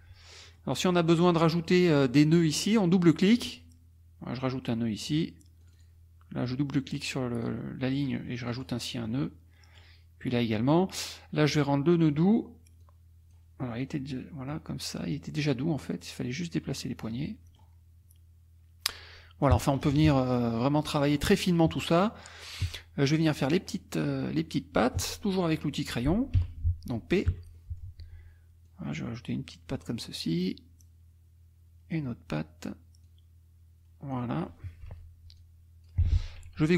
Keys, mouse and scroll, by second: 0.3 middle click, 0.3-0.7 scroll up 1, 3.4 click, 4.4 click, 5.6 click, 6.4-7.6 drag, 8.4 click, 9.1 click, 11.5 click, 12.8 click, 13.8 click, 15.1 click, 16.4 click, 17.3 middle click, 18.9 click, 19.8 KP_Subtract, 20.8 click, 22.2 click, 26.4 n, 27.3 p, 27.5 click, 28.7-30.0 drag, 30.8-32.1 drag, 33.0-34.3 drag, 34.9 F2, 35.4 click, 36.0 F1.